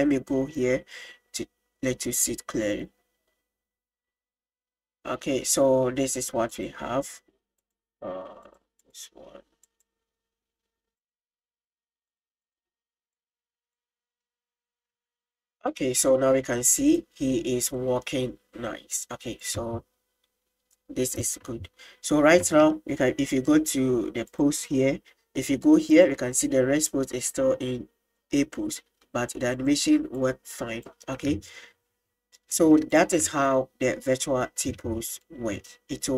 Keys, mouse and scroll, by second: 6.5 click, 7.6-8.6 drag, 8.8-10.0 drag, 11.0 click, 12.4 drag, 13.2 click, 15.0 space, 15.8-16.2 middle drag, 17.0 click, 17.9 middle click, 18.8 middle click, 19.6 click, 21.4 click, 22.1 middle click, 22.5 space, 24.3 click, 26.0 click, 26.3-29.0 middle drag, 29.6-31.0 drag, 31.0 middle drag, 31.4 space, 33.0 click.